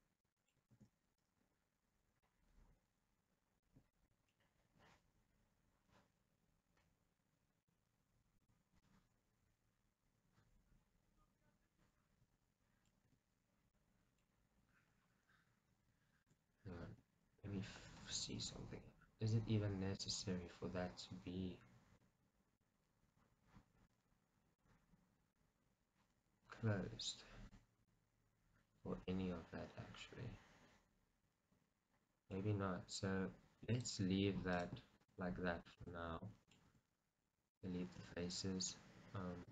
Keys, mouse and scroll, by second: 0.8 ctrl+z, 1.3 middle click, 4.3-14.3 middle drag, 8.6 click, 13.2 Tab, 13.4-13.8 scroll down 2, 14.6 scroll up 1, 15.9 Tab, 17.4 KP_Decimal, 18.1-18.4 scroll down 1, 18.6 middle click, 19.5-20.7 middle drag, 20.9-33.8 middle drag, 22.4-22.7 scroll up 2, 25.1-25.5 scroll down 2, 33.8-35.1 drag, 35.8 shift+click, 36.3-39.5 middle drag, 36.8 x.